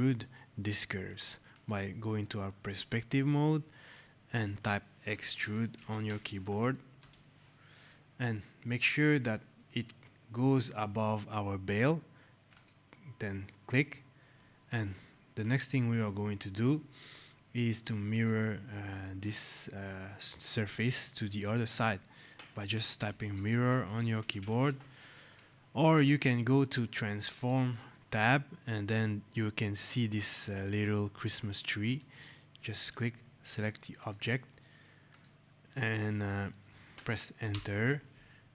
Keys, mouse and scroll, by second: 1.3 click, 3.1 right click, 3.8 shift+right click, 4.7-6.5 typing, 6.8 Return, 12.3 click, 13.3 right click, 15.2 click, 22.8-24.6 typing, 25.7 click, 32.0 click, 37.3 Return.